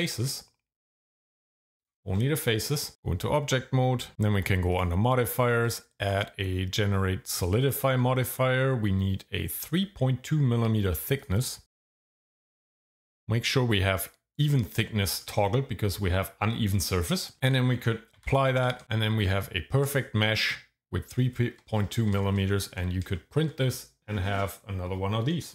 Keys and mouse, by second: 2.9 Tab, 4.7 click, 5.6-7.7 drag, 11.3 click, 14.4 click, 18.2 ctrl+a, 19.3 Tab, 19.8 shift+middle click, 23.1 shift+middle click.